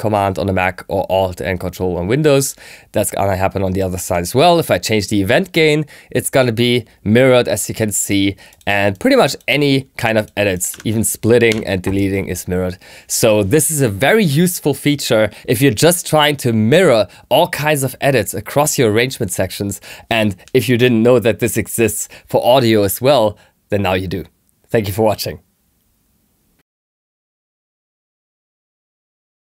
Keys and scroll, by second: 9.9 3, 11.4 BackSpace.